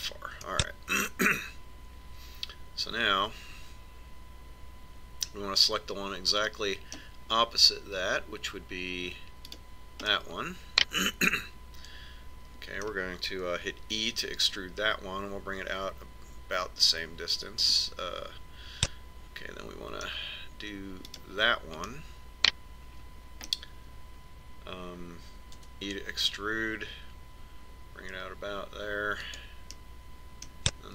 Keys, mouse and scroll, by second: 1.6-3.6 middle drag, 10.7 right click, 11.3-12.3 drag, 12.3 middle click, 15.2 e, 20.1-22.0 middle drag, 22.4 right click, 23.2 middle click, 23.3 click, 24.3 middle click, 26.9 e.